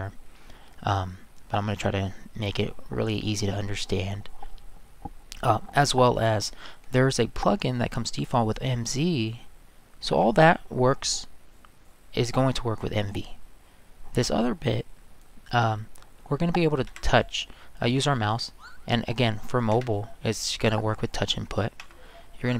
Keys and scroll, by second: 16.9 Escape, 19.7 Escape.